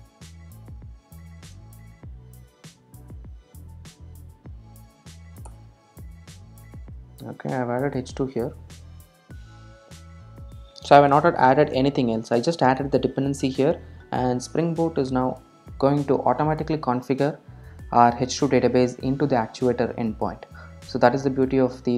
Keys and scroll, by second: 5.7 Return.